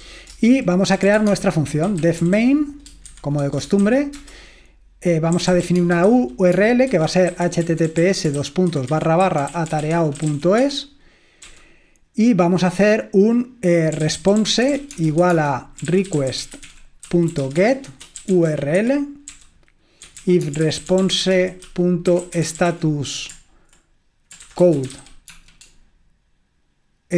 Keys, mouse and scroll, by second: 0.0-11.4 typing, 0.3 Return, 12.7-23.1 typing, 24.5-25.8 typing, 27.0-27.1 typing.